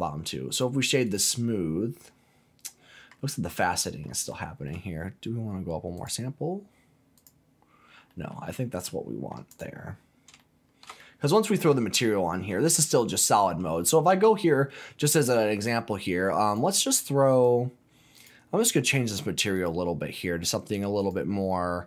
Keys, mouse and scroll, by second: 1.0 click, 1.4-3.1 middle drag, 3.3-3.6 scroll up 2, 3.6 middle click, 4.0 scroll down 1, 4.3 shift+middle click, 5.9 click, 7.1 click, 8.1 middle click, 8.5-8.8 scroll down 2, 8.8 middle click, 9.5 click, 9.9-10.3 scroll up 2, 10.4 shift+middle click, 11.0-12.5 middle drag, 14.0 z, 17.3-21.8 drag.